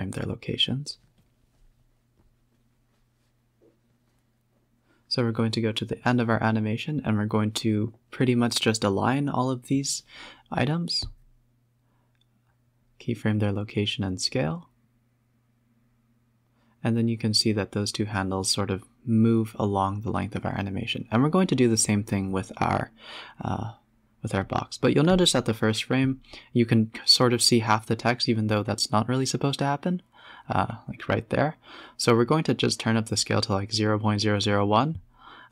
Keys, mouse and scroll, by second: 0.0-1.7 drag, 1.7-2.3 scroll down 5, 2.3 click, 3.0 KP_7, 3.5-4.2 scroll down 10, 4.2 g, 6.6 click, 7.0 g, 9.4 shift+click, 10.2 ctrl+click, 10.5 click, 11.6 shift+click, 13.7-15.9 drag, 16.2-17.6 drag, 17.9 click, 18.3 click, 18.9 click, 19.5 s, 23.8 space, 25.7 space, 26.7-29.0 drag, 30.5-30.9 scroll up 12, 31.6 click, 32.1-33.2 drag, 33.2 KP_0, 33.3 KP_0.